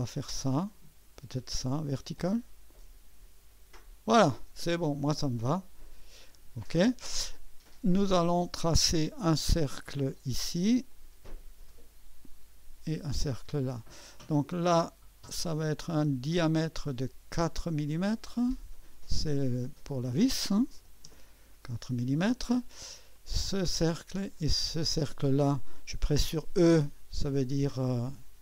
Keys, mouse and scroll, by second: 0.0-2.2 drag, 8.3 click, 10.1 click, 10.9 click, 12.4 click, 13.3 click, 16.4 click, 18.2 click, 19.1 click, 20.5-21.3 typing, 23.1 click, 24.8 click.